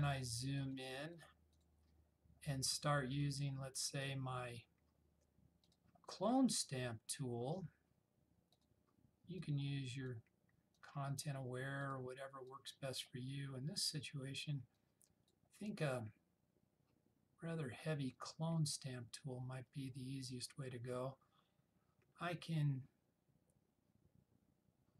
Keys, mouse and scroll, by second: 3.6-4.2 click, 8.6-10.4 drag, 19.3-20.5 typing.